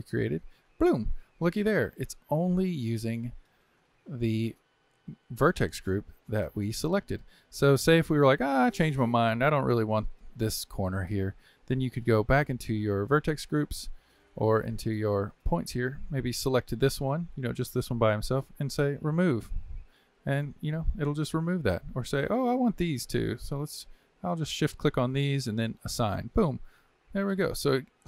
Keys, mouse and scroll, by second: 1.3-12.8 middle drag, 13.1 click, 14.5 Tab, 15.2 click, 15.9-19.1 middle drag, 19.1-20.2 drag, 20.2-22.6 middle drag, 22.6 click, 23.5 shift+click, 24.0-25.9 middle drag, 25.9 click, 26.7-27.9 middle drag, 27.9 shift+click.